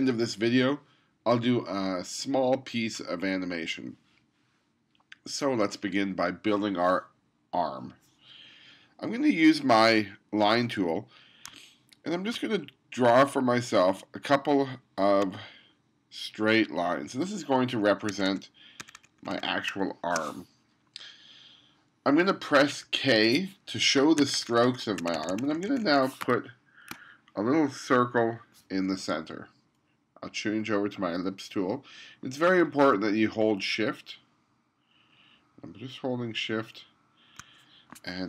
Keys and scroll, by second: 18.2 2, 18.9 2, 19.8 space, 22.9 k, 24.2 1, 25.0 2, 26.2 space.